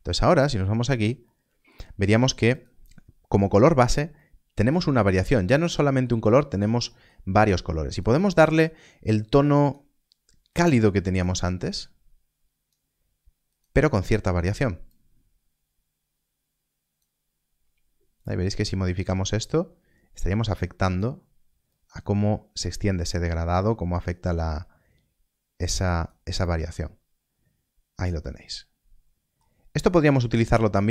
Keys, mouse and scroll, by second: 0.1 ctrl+shift+click, 1.4 middle click, 3.2 click, 3.5-4.1 scroll up 1, 4.1 middle click, 6.3 scroll up 1, 6.8 middle click, 7.9 click, 26.4 middle click, 29.8 scroll down 1, 30.6 middle click.